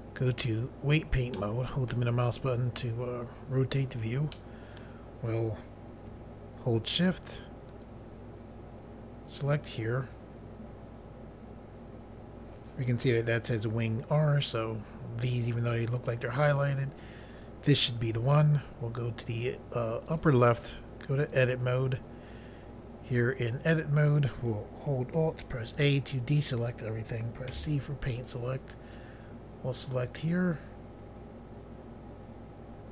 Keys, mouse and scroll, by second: 1.3 middle click, 2.1-3.1 scroll up 1, 4.3 middle click, 7.6 shift+click, 20.0 click, 21.2 click, 25.5 alt+a, 27.5 c, 28.2 click.